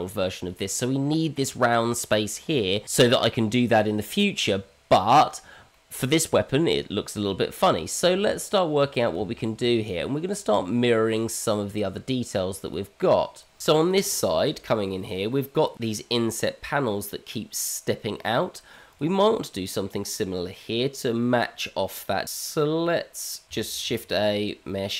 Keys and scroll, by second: 8.1 Tab, 9.1 Tab, 22.2 Tab, 23.8 shift+a.